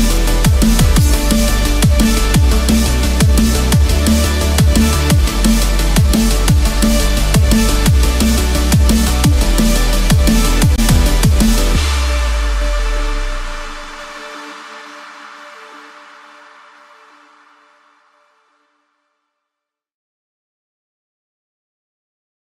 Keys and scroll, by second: 3.1 ctrl+z, 11.5 ctrl+z, 21.6 ctrl+-.